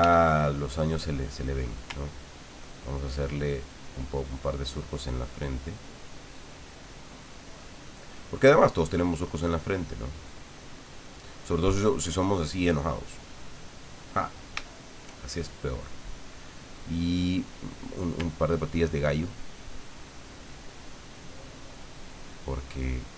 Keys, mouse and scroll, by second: 0.0 f, 0.6 click, 2.1 ctrl+click, 3.1-4.5 ctrl+drag, 5.1-6.7 ctrl+drag, 7.0 ctrl+click, 8.1 ctrl+click, 8.9 ctrl+click, 9.7-12.9 ctrl+drag, 13.7 click, 14.7 shift+click, 15.3 shift+click, 19.7 ctrl+click, 20.8 ctrl+click, 21.6 ctrl+click, 22.2 ctrl+click.